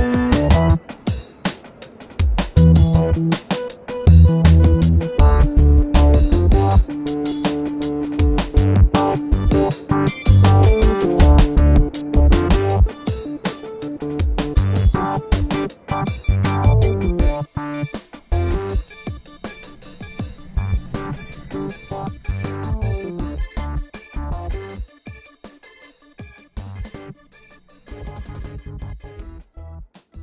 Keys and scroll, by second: 23.6 alt+super+0, 24.1 super+space, 24.7 space, 25.2 space, 26.8 super+-, 28.1 space.